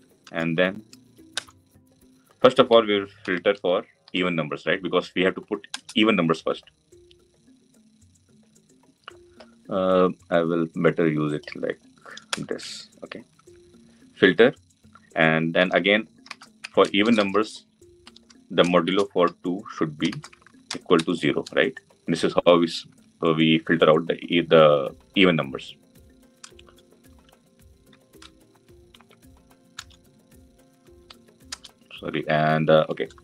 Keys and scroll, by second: 5.5 Return.